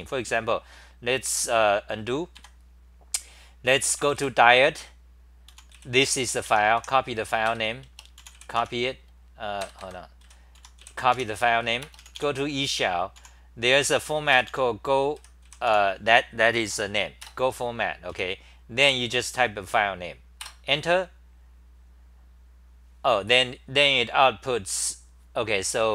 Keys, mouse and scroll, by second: 2.4 4, 5.2-6.8 typing, 6.5 Home, 7.4 ctrl+g, 8.6 Home, 9.6 ctrl+g, 9.8 ctrl+g, 10.3-11.3 typing, 13.1 u, 18.1 End, 18.8 k, 19.4 BackSpace, 20.4 Return, 24.1-25.9 scroll up 9.